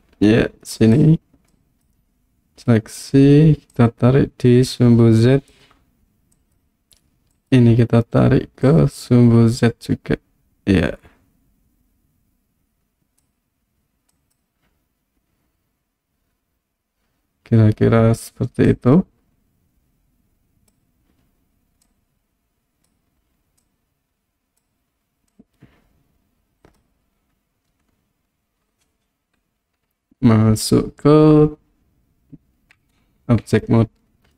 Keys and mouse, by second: 0.8 click, 1.6 click, 3.8-5.5 drag, 6.4 click, 7.5 click, 8.7-13.2 drag, 14.3 click, 18.7-20.7 drag, 21.9-22.9 drag, 23.6 click, 25.3-26.8 drag, 32.8 Tab.